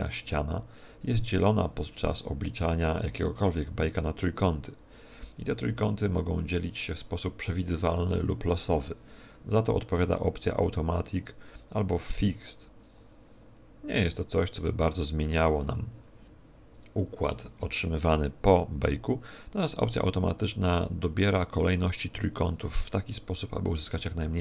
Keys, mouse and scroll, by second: 10.9 click, 14.3 click.